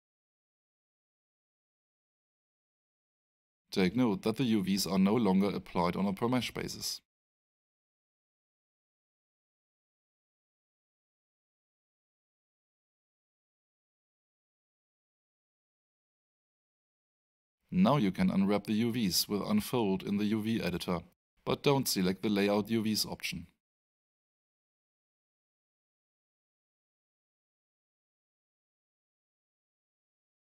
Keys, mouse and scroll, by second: 0.4 alt+click, 3.6 alt+middle click, 4.9 alt+right click, 5.9 alt+click, 10.7 alt+right click, 12.5 middle click, 15.3 click, 19.2 click, 22.9 click, 23.8 3.